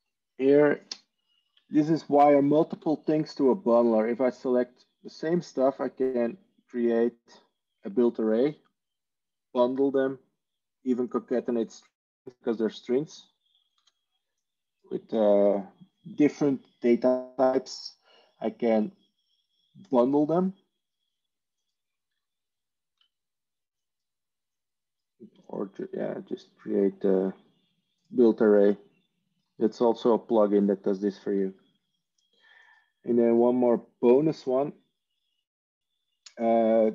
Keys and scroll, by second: 3.4 Tab, 13.8 ctrl+z, 22.8 ctrl+z.